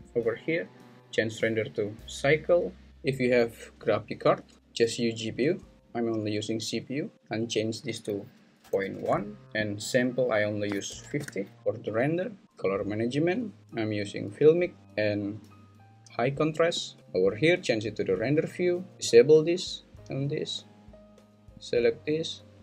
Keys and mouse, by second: 0.0 click, 1.3-2.8 drag, 4.5-5.8 drag, 7.2-9.1 drag, 9.8-11.2 drag, 13.1 drag, 13.6-14.5 drag, 14.8 click, 20.2 click, 21.7-22.6 drag.